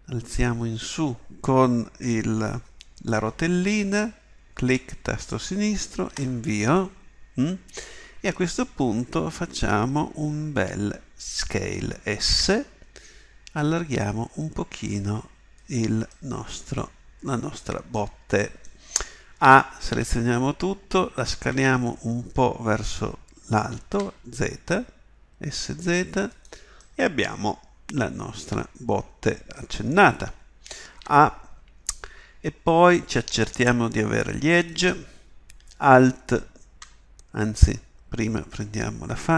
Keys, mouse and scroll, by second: 12.2 s, 16.3 middle click, 16.5 middle click, 19.4 a, 19.9 a, 21.3 s, 31.0 a, 36.0-39.3 right drag.